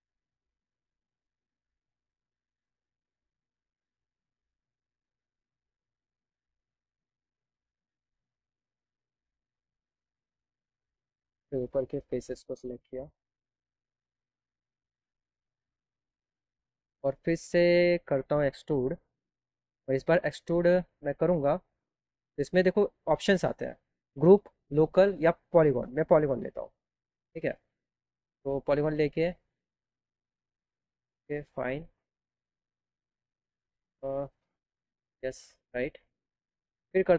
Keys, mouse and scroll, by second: 2.1 click, 4.5 right click, 10.4 click, 10.9 click, 11.3 click, 12.2 right click, 12.8 right click, 13.3 right click, 13.8 right click, 14.2 ctrl+right click, 14.7 ctrl+right click, 15.1 ctrl+right click, 19.8 click, 22.4 click, 25.7 click, 28.7 click, 29.4-31.8 drag, 30.2 scroll down 1, 32.6 click, 34.0 ctrl+z, 34.9 click.